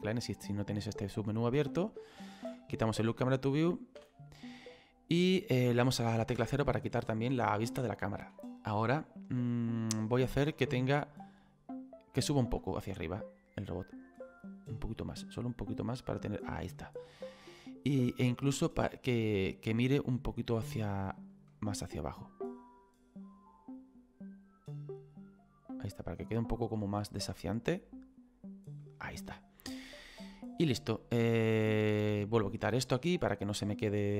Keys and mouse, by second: 2.8 click, 6.3 KP_0, 7.9 middle click, 10.2 middle click, 12.2 right click, 14.1 click, 15.2 click, 19.0 right click, 21.3 click, 22.6 click, 27.9 click, 32.4 click.